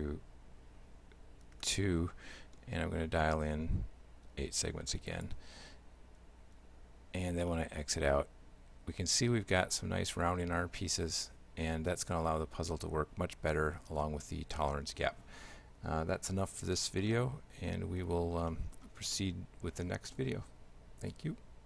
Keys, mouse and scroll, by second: 6.6 Tab, 7.5 shift+middle click, 17.1 shift+middle click, 18.4 scroll down 2, 18.5 middle click, 19.2 shift+middle click.